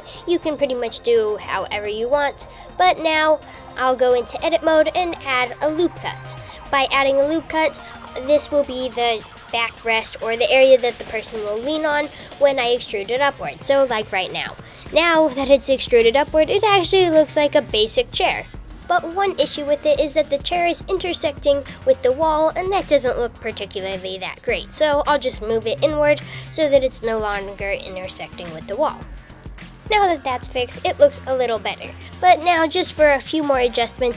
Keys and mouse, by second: 3.6 Tab, 5.5 super+r, 9.7 click, 11.5 e, 17.7 Tab, 19.0 Tab, 19.6 click, 20.3 shift+click, 21.5 click, 22.0 shift+z, 22.3 shift+z, 23.4 f, 24.1 super+z, 24.3 g, 28.2 Tab, 31.7 Tab, 33.7 g.